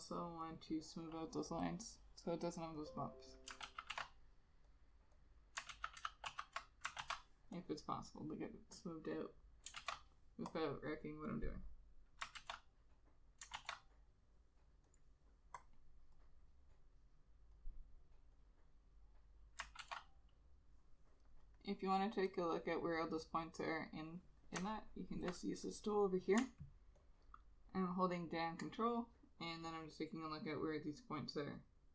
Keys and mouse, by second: 0.7 double click, 3.8 ctrl+z, 4.0 ctrl+z, 5.8 ctrl+z, 6.1 ctrl+z, 9.2 double click, 9.9 ctrl+z, 12.5 ctrl+z, 13.7 ctrl+z, 19.9 ctrl+z, 27.1 ctrl+click, 30.0 ctrl+click, 31.7 ctrl+click.